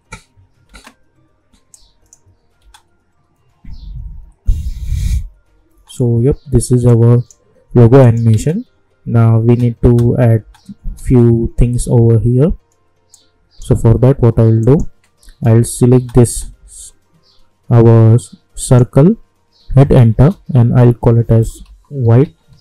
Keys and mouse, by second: 0.6 space, 1.7 click, 2.6 space, 5.7 space, 6.9 click, 8.3 space, 13.1-14.6 drag, 15.5 space, 18.6 click, 20.1 Return, 20.9-22.6 typing.